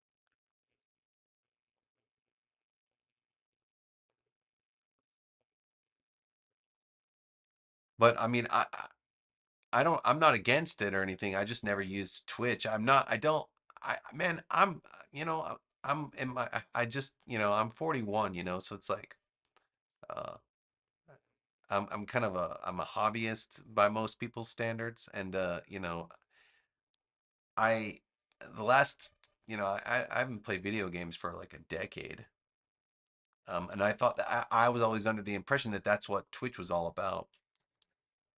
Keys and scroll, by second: 14.0 a, 37.4 super+=.